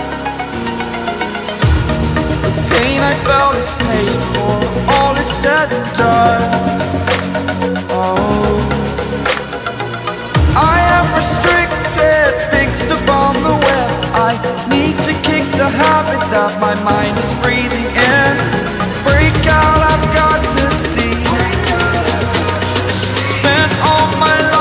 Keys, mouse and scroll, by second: 0.5 [, 0.6 click, 1.7-3.6 typing, 2.3 click, 2.4 click, 2.8 click, 3.1 click, 4.7-5.1 typing, 4.7 click, 5.2 click, 6.2 typing, 7.5-11.1 typing, 7.7 click, 8.2 click, 8.8 click, 9.2 click, 10.6 click, 11.3 click, 12.2-18.5 typing, 12.3 click, 12.9 click, 13.5 click, 14.2 click, 14.3 click, 14.9 click, 15.4 click, 16.7 click, 18.6 click, 20.4-24.3 typing, 20.6 click, 20.8 click, 21.8 click, 22.7 click, 23.2 click, 23.9 click, 24.3 click.